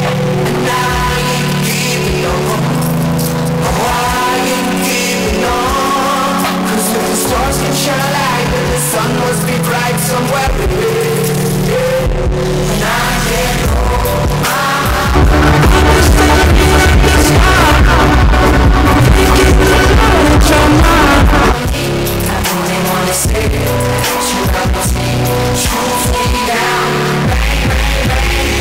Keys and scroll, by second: 22.2 Page_Down.